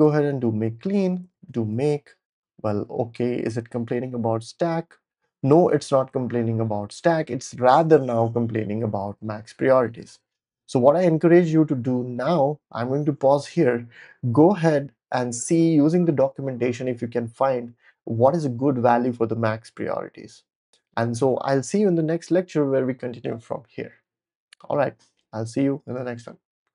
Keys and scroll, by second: 0.0-1.8 typing.